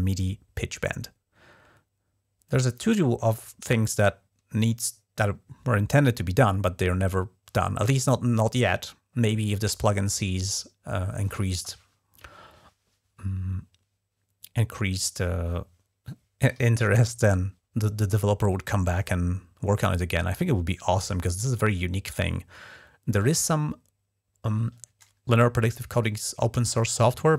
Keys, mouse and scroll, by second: 1.5-1.9 scroll down 2, 5.6 scroll down 2, 26.8 F11.